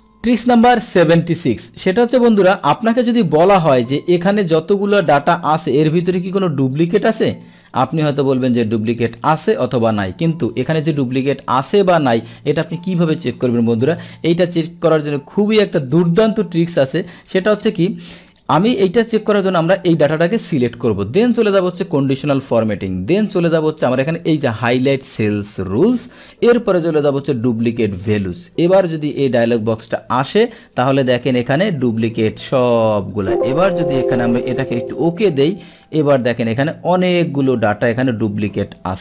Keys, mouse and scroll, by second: 0.2 click, 0.9 click, 2.2 click, 5.3 click, 6.7 click, 8.9 click, 10.5 click, 16.1 click, 17.5 click, 18.3 click, 18.9 click, 19.9 click, 22.0 click, 28.1 click, 29.6 click, 33.2 click, 34.8 click, 35.9 scroll down 1, 36.1 click, 37.1-38.5 scroll down 1, 38.5-39.0 scroll down 1.